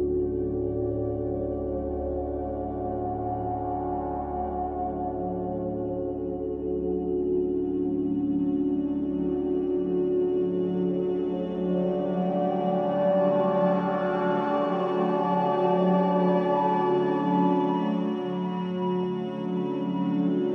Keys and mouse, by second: 0.8 click, 0.9 Tab, 1.5 Tab, 2.6 Tab, 2.6-3.9 middle drag, 4.8-6.2 middle drag, 7.0 Tab, 8.2 Tab, 9.9 Tab, 11.2-12.0 middle drag, 15.1-16.2 drag, 17.2 click, 19.5-20.2 middle drag.